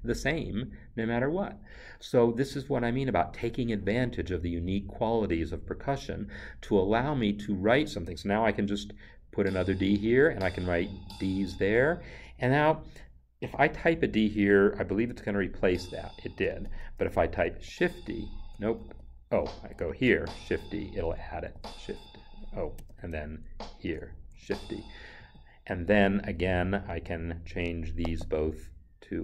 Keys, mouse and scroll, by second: 8.1 click, 9.3 d, 15.5 d, 17.6 shift+d, 18.8 ctrl+z, 19.3 Right, 20.1 shift+d, 23.4 Right, 24.3 shift+d, 25.2 Escape, 28.0 right click.